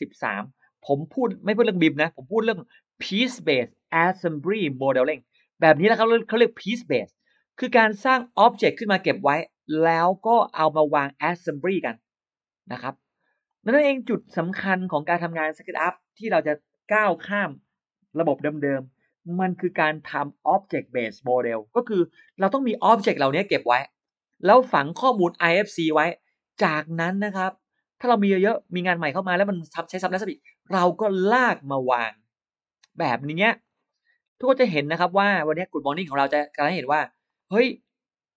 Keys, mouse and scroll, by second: 0.2 click, 1.1-1.4 scroll up 1, 2.8 click, 4.2-4.5 scroll down 2, 4.5-4.8 scroll up 2, 4.7-5.7 middle drag, 5.7 click, 6.3-6.6 scroll up 2, 8.0 click, 8.9 click, 10.2 click, 11.5 click, 12.0-12.3 scroll up 1, 13.3 click, 13.6-14.3 scroll down 1, 25.1 click, 25.6 middle click, 27.4 click, 28.2 click, 29.9 click, 31.1 click, 33.3 click, 34.4 click, 35.6 click, 36.2-36.5 scroll up 1, 37.1 click.